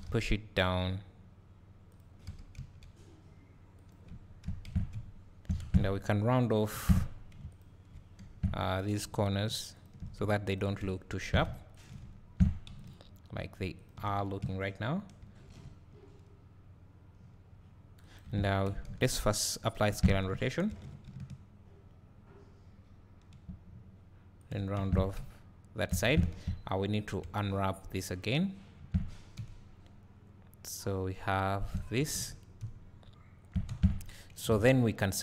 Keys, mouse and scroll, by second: 0.0 g, 2.0 click, 2.3 g, 3.9 click, 4.7 Tab, 4.9 `, 5.6 Tab, 6.8 3, 7.6 alt+click, 8.3 2, 8.8 click, 9.4 shift+click, 10.8 `, 11.8 ctrl+click, 12.0 `, 12.9 shift+click, 15.2 ctrl+b, 18.2 right click, 18.3 Tab, 19.5 ctrl+a, 19.9 Tab, 20.7 ctrl+b, 24.5 shift+click, 24.8 Tab, 25.2 `, 26.1 Tab, 26.4 a, 28.8 Tab, 33.7 Tab, 34.5 alt+a, 35.1 click.